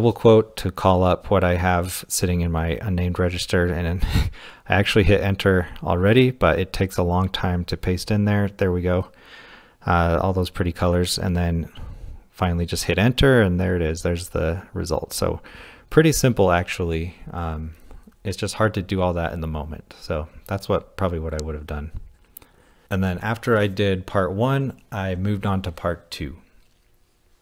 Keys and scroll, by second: 11.3 Return, 13.5 typing, 15.1-16.7 typing.